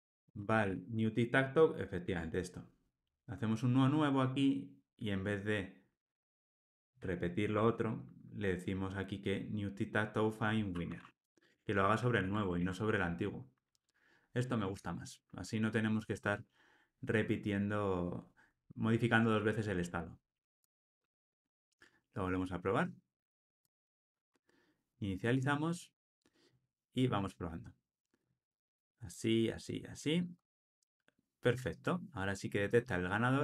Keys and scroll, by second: 2.0 Tab, 7.5 Tab, 11.4 Tab, 12.1 alt+super+l, 20.6 ctrl+r.